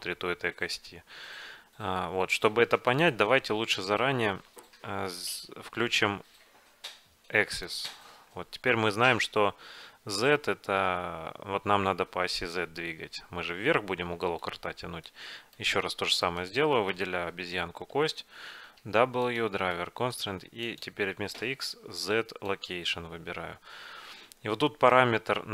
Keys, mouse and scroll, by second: 7.7-8.7 drag, 8.3-10.4 middle drag, 12.9-16.4 middle drag, 15.7 click, 15.7-18.3 right drag, 16.8 click, 18.3 middle click, 18.9 w.